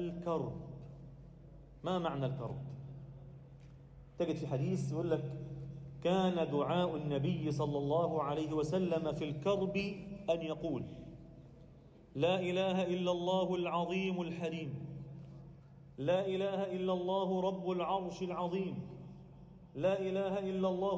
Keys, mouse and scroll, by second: 0.4 drag, 0.9-2.9 drag, 4.4 click, 4.7-5.2 scroll up 1, 5.2 click, 5.2 scroll up 1, 6.1 g, 8.2 a, 8.6 alt+shift+middle click, 9.0 scroll up 1, 10.8 ctrl+r, 11.3 click, 12.9 g, 19.2 shift+click, 19.9 shift+click, 20.1 shift+click.